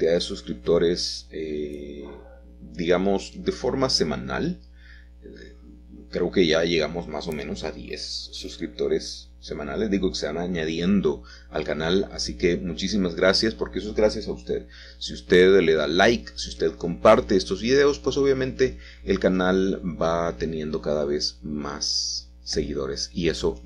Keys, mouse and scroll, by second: 3.3-4.5 drag, 4.9 g, 5.5 z, 7.1-8.2 drag, 10.9 s, 12.1 click, 13.0 click, 13.0 e, 13.5 s, 16.1-17.2 drag, 19.6 e, 19.8 z, 22.0 click, 22.5 s.